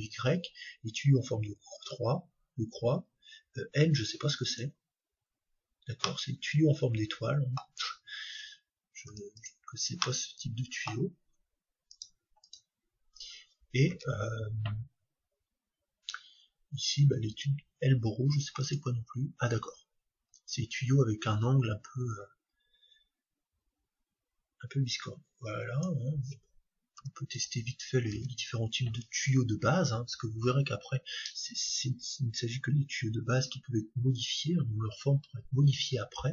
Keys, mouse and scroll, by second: 5.5 middle click, 5.6-6.0 scroll down 1, 6.0-7.9 middle drag, 10.0-11.9 middle drag, 11.9-13.9 right drag, 12.4-17.4 drag, 13.9 shift+a, 19.6-24.9 middle drag, 24.9-26.9 drag, 28.1 shift+a.